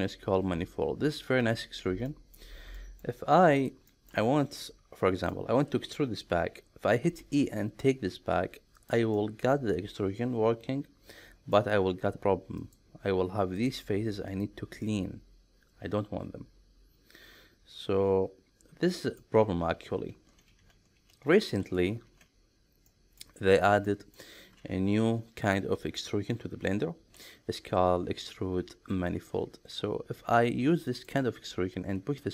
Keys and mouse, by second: 2.1 middle click, 2.8 middle click, 3.6 click, 3.9 shift+middle click, 4.6 middle click, 7.0 e, 8.7 click, 9.2-11.6 middle drag, 12.6 click, 13.6 click, 14.3 click, 14.8-19.2 middle drag, 20.1 ctrl+z, 20.7 ctrl+z, 21.1 ctrl+z, 21.6 ctrl+z, 22.9 middle click, 23.8 middle click, 27.1 alt+e.